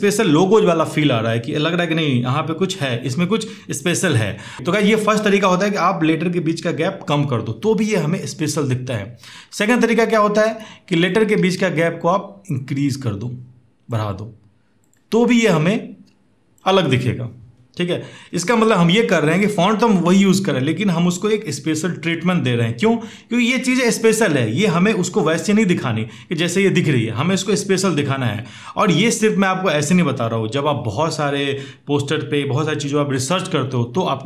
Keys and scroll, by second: 11.1 ctrl+a.